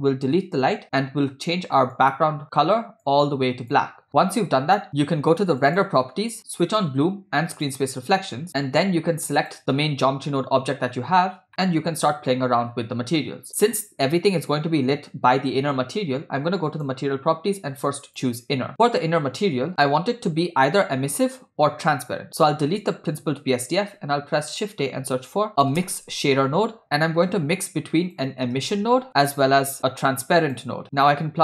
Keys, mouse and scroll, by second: 0.7 Delete, 1.9 click, 5.6 click, 6.9 click, 7.7 click, 9.4 click, 11.5 middle click, 12.8 scroll down 2, 16.7 click, 18.1 click, 18.7 click, 18.7 middle click, 22.3 click, 23.2 x, 24.1 shift+a, 27.4 shift+a, 29.8 shift+a.